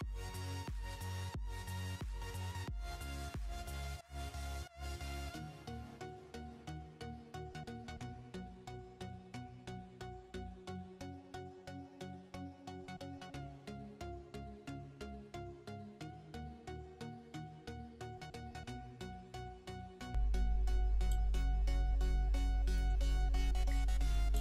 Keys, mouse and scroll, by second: 0.8 space, 0.9-2.7 drag, 2.7 space, 2.8 click, 3.0 space, 3.4-5.9 alt+drag, 5.9-6.4 alt+scroll down 2, 6.7 alt+scroll down 2, 6.7-7.2 alt+scroll up 2, 7.2 alt+scroll down 2, 7.5-8.0 alt+scroll up 2, 8.0 alt+scroll down 2, 8.1 space, 8.1 click, 8.7-9.6 alt+scroll up 2, 9.6 scroll up 1, 9.7 space, 9.8-15.4 drag, 15.4-17.6 drag, 17.6 ctrl+z, 18.8 alt+click, 19.8-21.0 alt+drag, 21.0-22.4 alt+drag, 22.4 alt+scroll up 1, 23.0-23.6 alt+scroll down 1, 23.8 alt+scroll down 1.